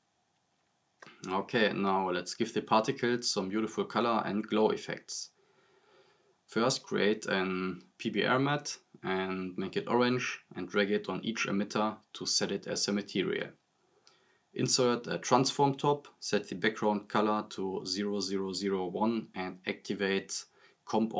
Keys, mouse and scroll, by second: 15.4 right click, 15.8 click, 16.3-18.3 typing, 18.7 click.